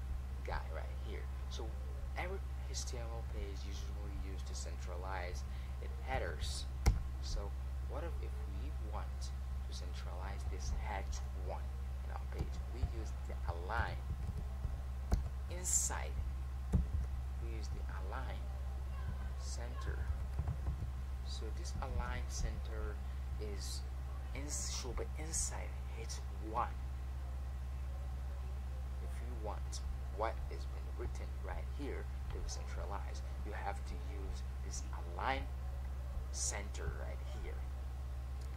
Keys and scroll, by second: 10.9 Escape, 11.2 a, 22.3 Caps_Lock.